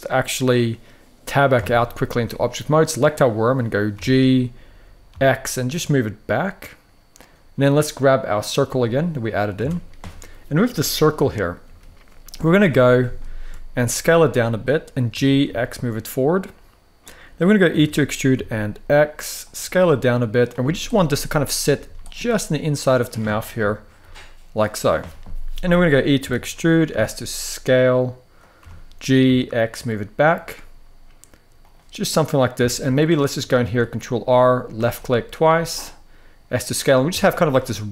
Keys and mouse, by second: 1.3 Tab, 2.2 click, 3.6 g, 4.8 x, 8.5-9.2 middle drag, 9.3 Tab, 10.9 KP_3, 11.3 KP_1, 12.2 shift+middle click, 12.9 shift+middle drag, 13.7 s, 14.4 click, 14.8 g, 15.2 x, 17.4 e, 18.1 x, 19.1 click, 19.3 s, 20.1 click, 20.3 z, 20.9 middle click, 21.5 z, 22.0-22.8 middle drag, 23.3 KP_3, 23.7 KP_1, 25.9 e, 26.6 s, 28.3 g, 29.6 x, 29.9 click, 30.1 s, 31.3 click, 32.4 shift+middle drag, 33.3 ctrl+r, 34.6 click, 35.2 s, 36.2 click, 36.8 a.